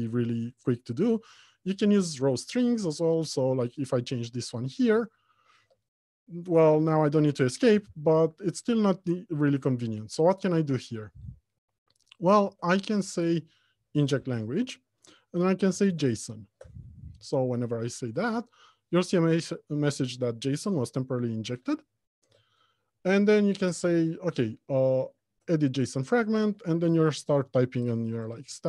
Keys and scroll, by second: 11.8 Delete, 12.7 alt+Return, 22.6 alt+Return.